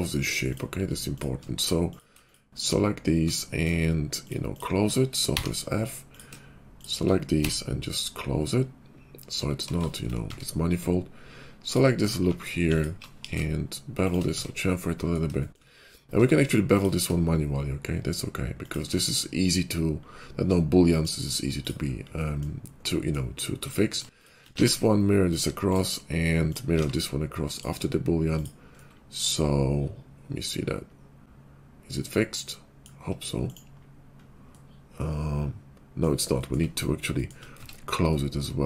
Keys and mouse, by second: 0.3 click, 4.1 shift+click, 5.2 f, 6.0 click, 7.4 f, 7.8-9.0 drag, 7.8-9.6 f, 9.0-10.7 middle drag, 10.2 Tab, 11.6 alt+click, 12.0 middle click, 12.7 alt+click, 12.9 middle click, 13.1 ctrl+b, 13.2 ctrl+middle click, 13.6 shift+middle click, 14.2 Tab, 16.1 q, 18.6 shift+q, 18.8-24.6 middle drag, 19.2 /, 19.3 /, 20.0 /, 24.4 alt+x, 25.3 alt+x, 25.3 click, 25.3-26.6 middle drag, 26.7 alt+x, 27.5 click, 28.3 click, 29.9-33.4 middle drag, 33.4 click, 33.5-38.6 middle drag, 33.8 /, 37.5 Tab.